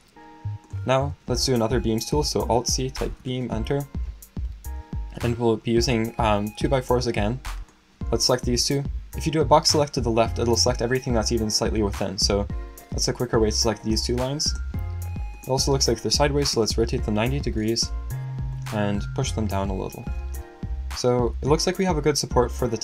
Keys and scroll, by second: 2.4 alt+c, 2.5-3.6 typing, 15.9-17.0 typing.